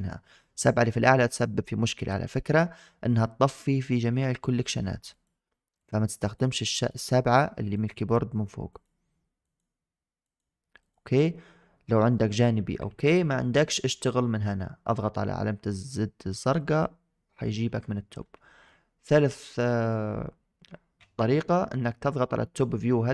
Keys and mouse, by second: 4.2 7, 5.0 click, 5.7 click, 6.1 click, 6.6 click, 7.6 click, 8.6 click, 9.3 click, 10.1 click, 10.7 click, 12.7 KP_7, 13.6 middle drag, 16.3 click, 17.3 shift+middle click, 18.5-18.9 middle drag, 19.2 middle drag, 19.5 shift+middle drag.